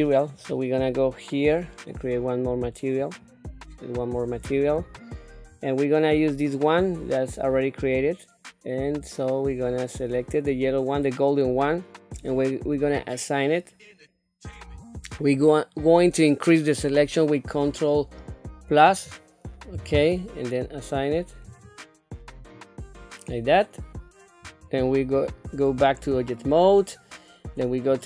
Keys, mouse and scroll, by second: 0.3 click, 3.0 click, 4.5-10.7 drag, 12.8 click, 18.8 ctrl+KP_Add, 21.5 click, 23.3-24.8 middle drag, 25.1 Tab, 25.8 scroll down 1, 26.4 middle click, 27.9 click.